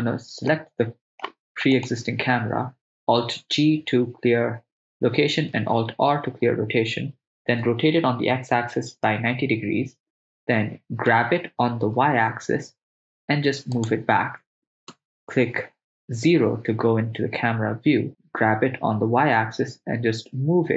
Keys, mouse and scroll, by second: 0.5-1.3 ctrl+middle drag, 1.8 right click, 3.3 alt+g, 5.7 alt+r, 7.3 r, 7.6 x, 8.0 9, 8.2 0, 9.1 Return, 11.2 g, 12.0 y, 13.8 ctrl+click, 14.0 ctrl+click, 14.9 KP_0, 18.4 g, 19.2 y.